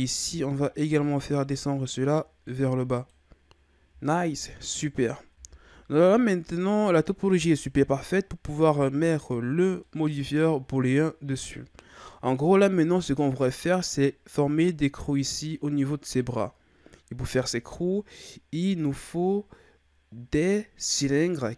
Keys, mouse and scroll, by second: 0.0 alt+right click, 1.4-3.4 drag, 3.4-4.1 scroll down 1, 4.1-5.3 shift+scroll up 4, 5.3 Tab, 5.8-6.3 scroll down 2, 6.3-7.4 middle drag, 7.4 Tab, 8.1-8.8 scroll up 1, 8.8 Tab, 9.8-14.8 middle drag.